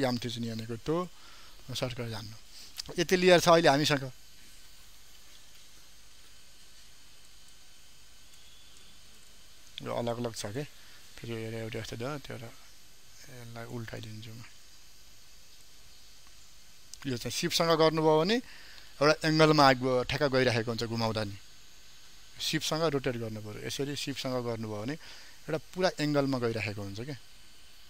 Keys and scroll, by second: 5.4 ctrl+m, 14.5 ctrl+t.